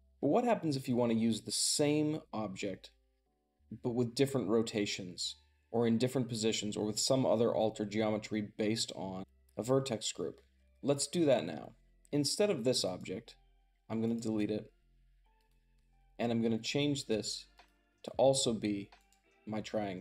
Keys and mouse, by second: 13.5 x, 13.9 click, 15.2 click, 16.8 click, 17.4 click, 18.8-20.0 drag.